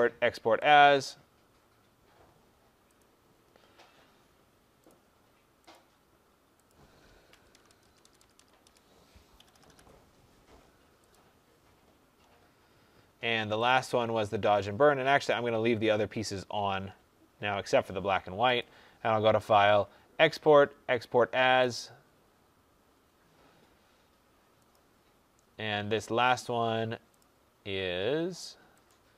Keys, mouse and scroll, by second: 0.6 click, 2.8 click, 4.8 click, 5.6 click, 6.6 click, 7.2 BackSpace, 7.7 BackSpace, 7.9 BackSpace, 8.3 BackSpace, 9.3 BackSpace, 10.9 click, 13.6 click, 15.2 click, 18.5 click, 27.1 click, 28.8 click.